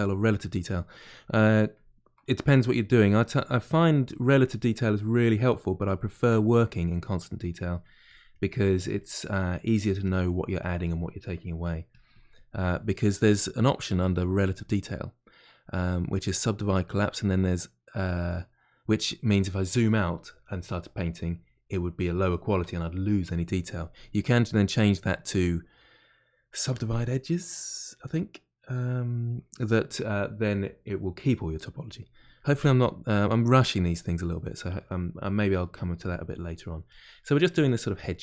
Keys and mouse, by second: 2.8-5.5 drag, 5.5-6.9 middle drag, 6.9-9.4 drag, 9.4 middle click, 10.0-11.2 drag, 11.2 middle click, 11.9-34.9 drag, 34.9 middle click, 35.7 click, 36.2 middle click, 36.9 click, 37.1 middle click, 37.7 click.